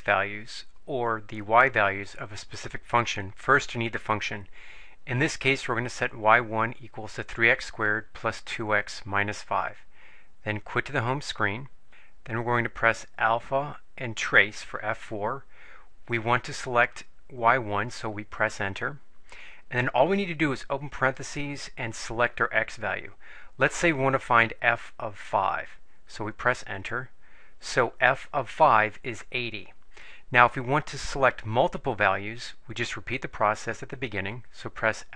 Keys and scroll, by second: 17.9 Return, 21.1 (, 25.5 5, 26.7 Return.